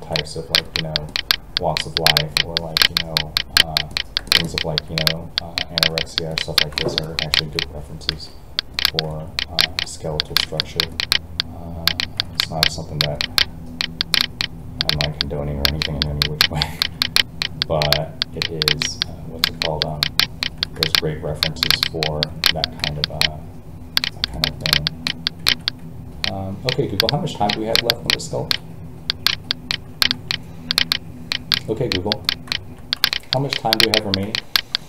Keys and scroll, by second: 8.1 alt+a, 28.4 alt+a.